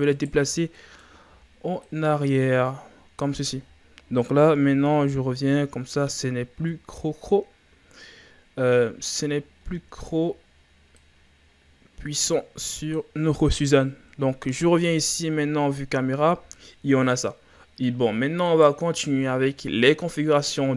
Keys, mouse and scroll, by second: 0.6 scroll down 1, 0.8-1.8 middle drag, 1.8-4.4 drag, 4.4 KP_0, 5.2-6.6 scroll up 5, 6.6-7.0 scroll up 4, 8.0-8.8 scroll down 4, 8.8-9.3 middle drag, 9.3-11.0 scroll down 13, 11.0-14.0 drag, 14.0 KP_0, 15.1-17.6 scroll up 3, 18.5 right click.